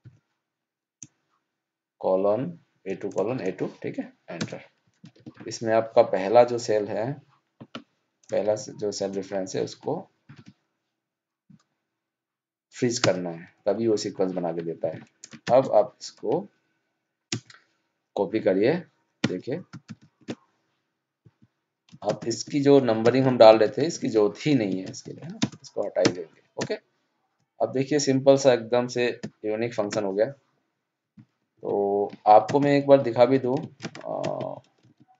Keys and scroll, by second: 14.7 ctrl+c, 15.4 ctrl+shift+Down, 25.3 ctrl+space, 29.7 ctrl+0, 31.5 ctrl+z.